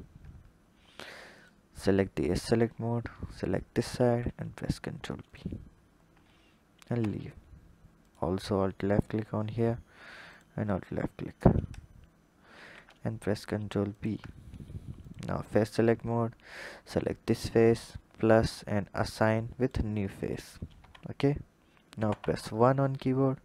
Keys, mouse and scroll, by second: 1.2 click, 2.3 alt+click, 3.7 ctrl+b, 5.9 Tab, 6.7 Tab, 7.8 alt+click, 8.6 alt+click, 10.0 alt+shift+click, 12.3 ctrl+b, 14.9 click, 15.2 click, 17.3-20.7 drag, 20.7 Tab, 21.8 KP_1.